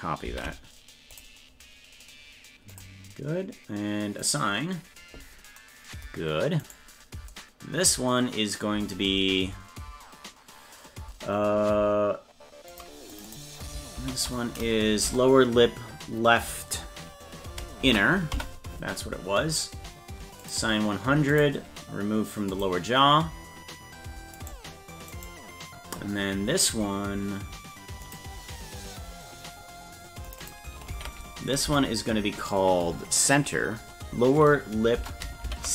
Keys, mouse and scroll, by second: 4.2 click, 6.7 right click, 12.7 click, 13.1 click, 13.3-19.0 drag, 20.4 click, 21.3 click, 22.5 click, 24.4 right click, 25.2 right click, 28.1 click, 30.3 click, 30.4-35.7 drag.